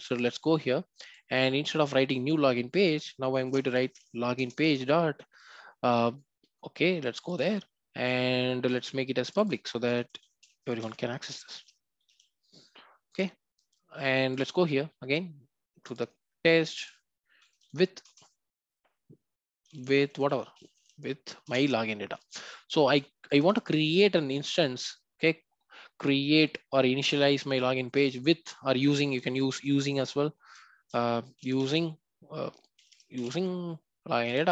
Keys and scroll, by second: 4.3 Return, 7.4 ctrl+b, 18.0 Return, 21.4 Return, 23.6 Return, 30.4 shift+F6.